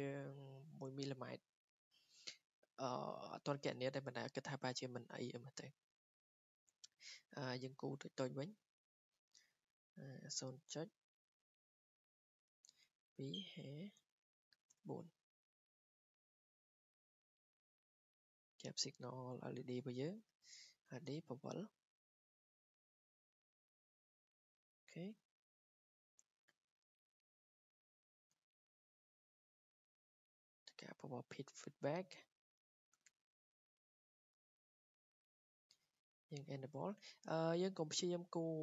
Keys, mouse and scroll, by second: 0.2 click, 8.2 click, 10.3 0, 12.1-15.7 typing, 12.8 click, 16.4 click, 17.6 click, 17.7 Return, 18.3 click, 20.1 Escape, 20.5 click, 20.9 typing, 22.3 click, 23.0 click, 23.6 click, 24.6 r, 26.4 scroll down 1, 26.8 scroll, 27.3 click, 28.2 click, 28.8 middle click, 29.5 click, 30.4 click, 31.3 scroll, 32.0 click, 35.3 click, 36.4 click, 37.3 scroll.